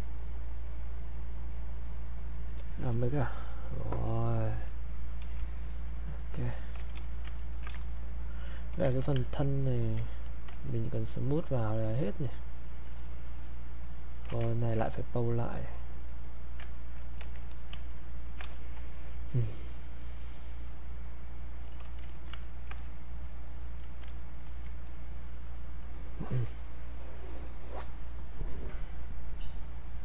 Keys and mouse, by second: 5.6 click, 6.9 alt+shift+click, 7.3 ctrl+right click, 7.7 ctrl+space, 8.3 ctrl+click, 8.9 ctrl+alt+click, 9.2 ctrl+alt+right click, 9.8-14.5 alt+drag, 14.5 ctrl+right click, 14.8 click, 16.7 ctrl+right click, 17.2 click, 17.9 ctrl+right click, 18.5 alt+click, 22.4 ctrl+alt+right click, 22.7-28.0 ctrl+drag.